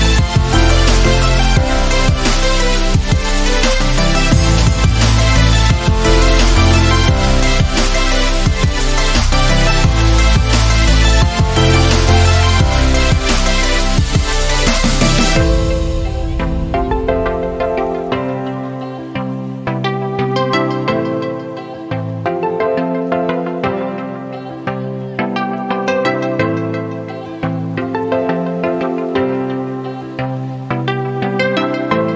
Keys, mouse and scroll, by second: 7.7 space, 7.8-8.4 click, 8.2 space, 8.9-10.1 drag, 13.5 right click, 14.8 click, 15.4 right click, 17.5 typing, 19.2 click, 19.2 typing, 22.0 Right, 22.0 typing, 23.0 shift+Right, 25.3 Left, 27.9 click, 29.4-30.5 typing, 29.6 click.